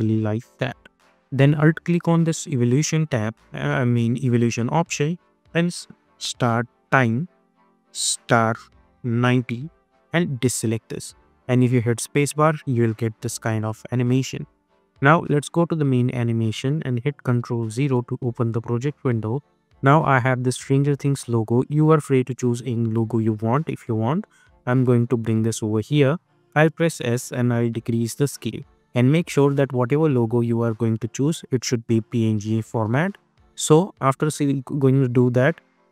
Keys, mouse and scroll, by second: 6.0-9.1 typing, 10.7 click, 11.1 space, 14.5 space, 15.3 click, 19.7 click, 24.3-26.5 drag, 26.5 s, 27.2-32.0 drag.